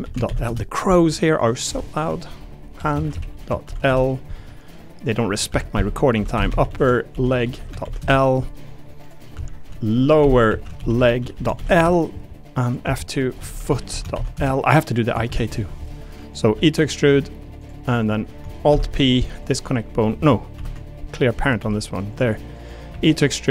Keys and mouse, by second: 1.6 F2, 5.1 click, 5.5 F2, 6.8 p, 9.3 F2, 12.6 click, 12.8 F2, 13.6 o, 16.3 click, 16.5 e, 17.3 click, 17.6 click, 18.0 click, 18.7 alt+p, 20.5 alt+p, 21.6 g, 22.9 e.